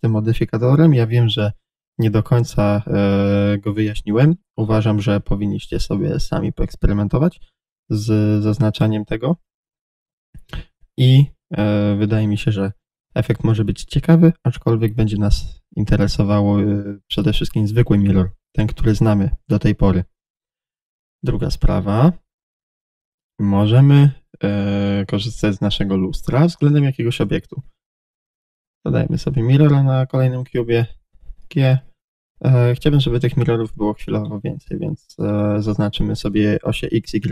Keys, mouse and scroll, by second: 2.4-2.7 scroll down 1, 5.0-5.8 scroll up 1, 9.4 click, 9.7 drag, 11.2-26.7 middle drag, 13.7 scroll down 1, 21.4 shift+a, 24.9 g, 26.7-27.1 scroll down 1, 27.1 Tab, 28.1 click, 30.6 g, 32.1 click, 34.5-37.3 middle drag, 35.6-36.0 scroll down 1.